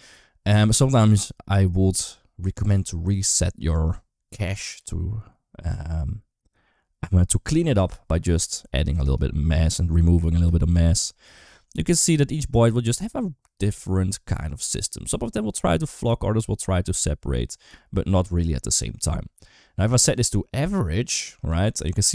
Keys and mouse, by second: 4.6 click, 8.9-10.2 drag, 10.2 space, 20.4 space, 21.2-22.1 drag.